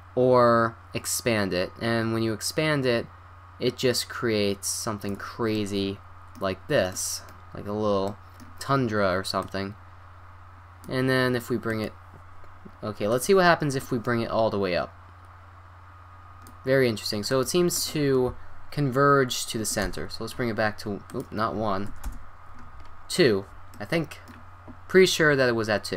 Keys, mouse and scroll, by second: 5.5-6.4 middle drag, 7.0-8.5 middle drag, 9.4-11.2 drag, 11.7-13.5 drag, 13.8-15.6 drag, 17.3-19.5 drag, 21.1-22.8 drag, 22.9 click, 23.1-25.9 middle drag.